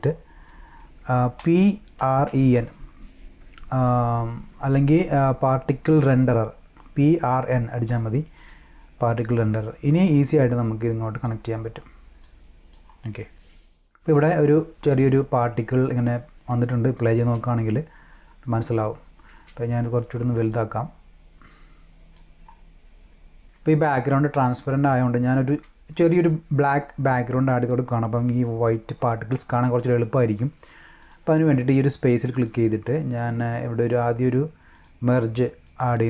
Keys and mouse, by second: 1.4-3.0 typing, 8.3 click, 10.1-11.2 drag, 12.2-12.7 drag, 15.1-15.8 drag, 16.9 click, 17.1 space, 19.3 space, 20.5-22.1 drag, 22.7 click, 23.2 click, 23.4 space, 31.0 click, 32.3 click, 34.7 click, 35.6-36.0 drag.